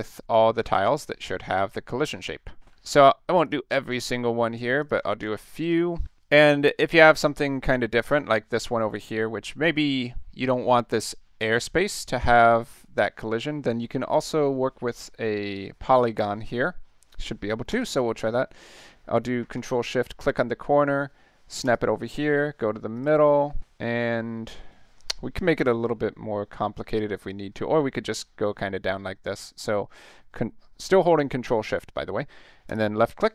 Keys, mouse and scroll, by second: 0.3 click, 0.7 ctrl+shift+v, 1.4-1.8 middle drag, 2.7 ctrl+shift+v, 3.4 click, 3.8 ctrl+shift+v, 4.8 click, 5.1 ctrl+shift+v, 5.6 click, 6.0 ctrl+shift+v, 8.0 click, 17.7 click, 20.2 ctrl+shift+click, 21.6 ctrl+shift+click, 22.9 ctrl+shift+click, 32.7 click.